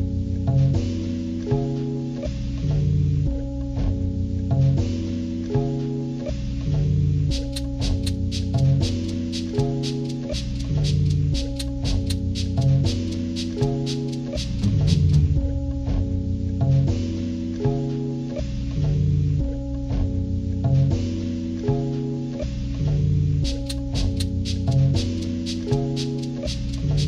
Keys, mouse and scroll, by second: 3.7-4.9 drag, 6.0 click, 7.1 click, 9.1-10.4 drag, 11.3 click, 13.3 click, 14.4 click, 17.8 click, 19.9 click, 21.5 click, 23.5 click, 24.4 click, 24.9 ctrl+-, 25.4 ctrl+-, 25.9 ctrl+scroll up 2, 26.9-27.0 drag.